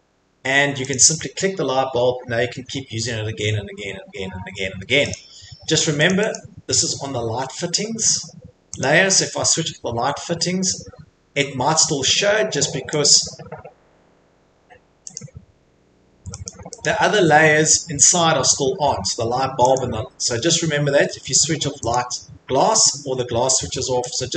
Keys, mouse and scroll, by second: 0.9 click, 2.1-2.9 scroll, 5.1 click, 5.8 Escape, 6.1 click, 6.3 click, 7.4 middle click, 8.8 click, 11.8 click, 12.3 click, 13.0 click, 15.2 click, 16.5 click, 16.8 click, 19.7 click, 21.9 click, 24.1 click.